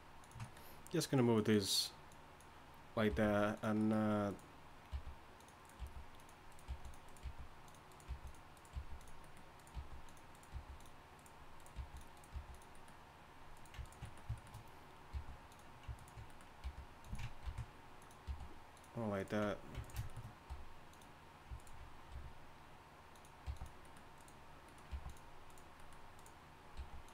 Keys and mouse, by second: 1.5-3.1 drag, 3.1 g, 4.9-10.5 typing, 11.7 g, 12.3 g, 15.1 g, 16.6 g, 17.4 ctrl+b, 18.2 g, 20.5 g, 22.1 r, 23.4 g, 24.9 g, 26.8 g.